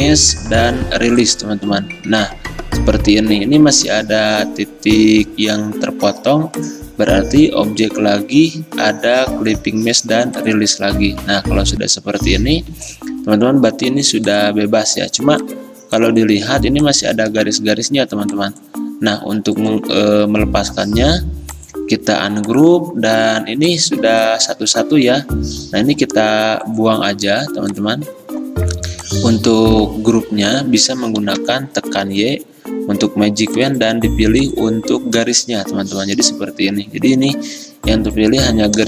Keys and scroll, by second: 31.5 y.